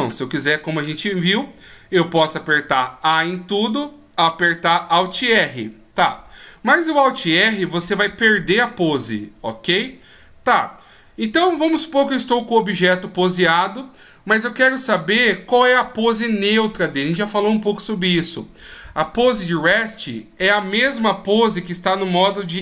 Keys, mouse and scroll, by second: 2.6 a, 4.7 alt+r, 11.3 ctrl+z.